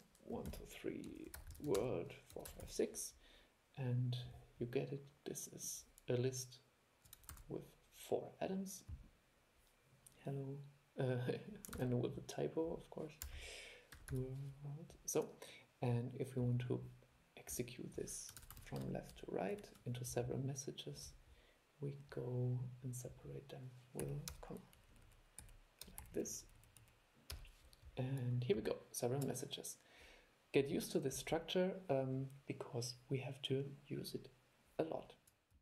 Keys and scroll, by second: 7.5 super+e, 11.9 super+e, 18.6 super+c, 18.8 super+v.